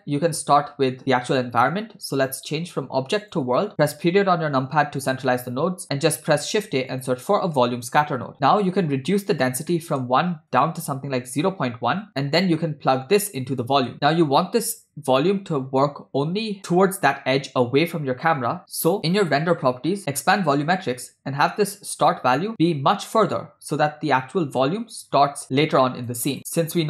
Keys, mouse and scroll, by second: 2.2-3.4 drag, 3.8 KP_Decimal, 5.1 middle click, 5.9 click, 6.4 shift+a, 9.7 middle click, 10.5-12.1 drag, 12.1 scroll down 2, 12.9-13.9 drag, 19.2 click, 20.1 click, 22.0-26.8 drag.